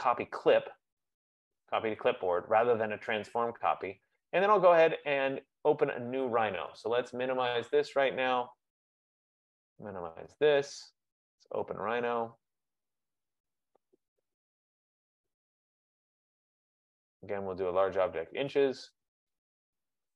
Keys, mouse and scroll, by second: 8.1 click, 10.0 click, 11.6 click, 11.9 click, 16.6 click.